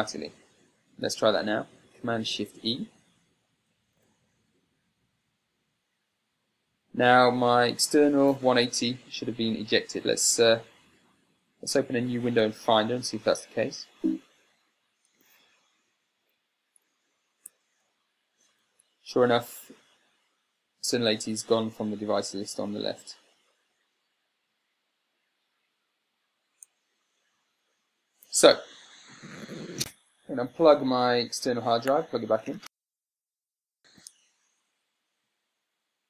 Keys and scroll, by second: 4.2 e, 13.0 super+w, 14.3 n, 15.6 Tab, 18.1 n.